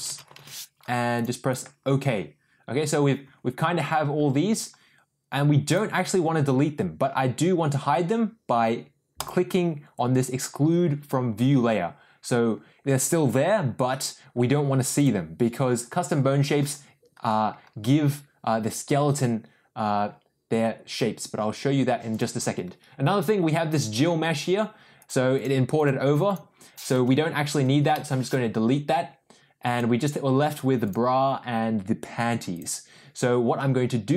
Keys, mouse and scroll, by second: 1.5 click, 5.7 click, 9.4 click, 20.9 click, 22.1 click, 24.9 click, 25.3 click, 28.2 Delete, 29.7 click, 30.8 click, 32.5 click.